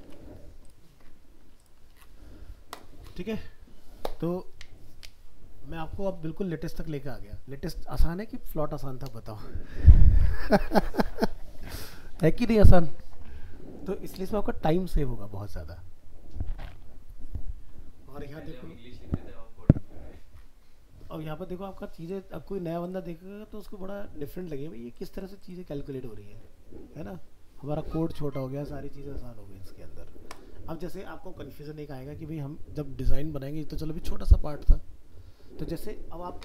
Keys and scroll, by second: 0.0 alt+Tab.